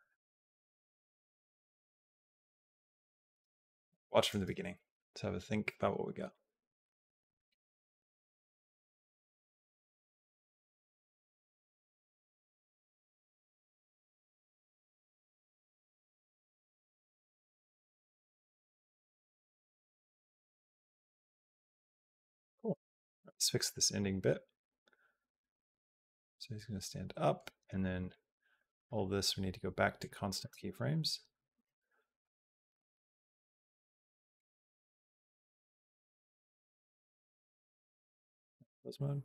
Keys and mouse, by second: 3.1 space, 4.0 click, 4.2 space, 22.6 space, 23.8-27.2 drag, 27.5 click, 27.8 b, 28.7-29.9 right drag, 30.2 space, 31.4 space, 32.0 a, 34.1 click, 34.7 b, 36.2-37.6 right drag.